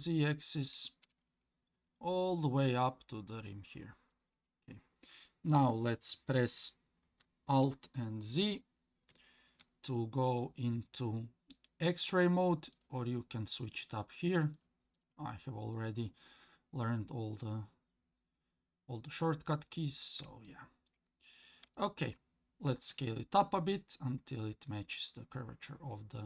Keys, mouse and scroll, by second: 8.4 alt+z, 12.7 click, 13.7 click, 14.5 click, 14.9 click, 15.7 click, 16.5 click, 19.0 click, 19.5 click, 20.4 shift+middle click, 21.2-21.7 scroll up 3, 21.7 shift+middle click, 22.9 s.